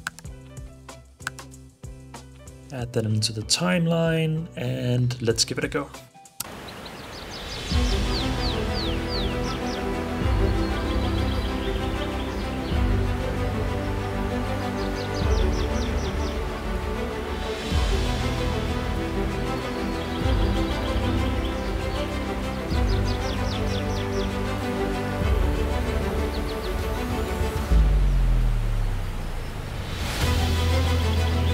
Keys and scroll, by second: 1.9 super+z.